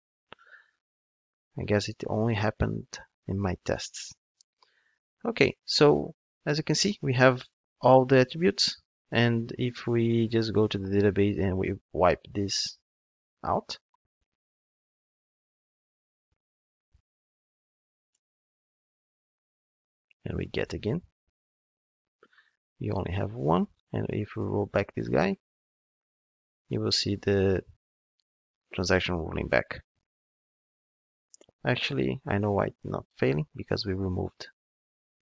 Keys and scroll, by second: 17.0 super+BackSpace, 18.0 super+Return.